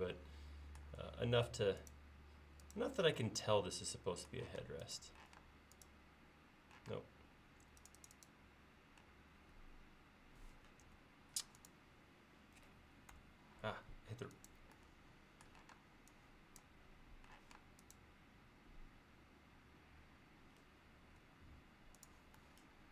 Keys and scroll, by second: 4.6-5.3 typing, 6.9 space, 10.9 m, 13.2 Left, 15.8 space, 17.5 m, 21.3 Up.